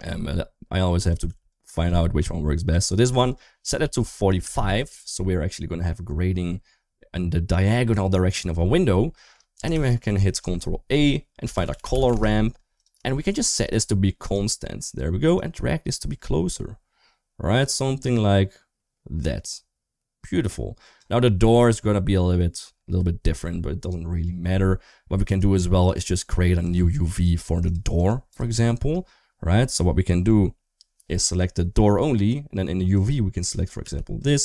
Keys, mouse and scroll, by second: 1.3-2.5 drag, 3.1-4.3 drag, 5.3-5.7 middle drag, 8.0 middle drag, 8.9 middle click, 9.5 shift+a, 11.9 r, 12.9 shift+middle click, 13.6 click, 15.2-20.8 drag, 25.1-25.8 drag, 26.4 Tab, 26.9 3, 27.5 shift+click, 27.8 shift+click, 28.1 shift+click, 29.4 3, 32.8-33.3 drag, 33.6 g.